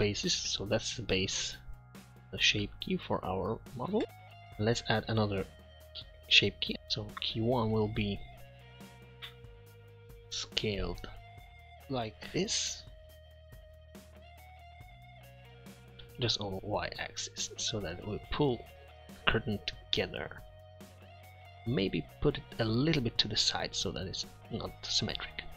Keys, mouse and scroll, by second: 0.4 middle drag, 1.4-1.8 middle drag, 2.4 middle click, 4.4 Tab, 8.3 middle click, 9.4 Tab, 10.4 s, 24.1-25.3 middle drag.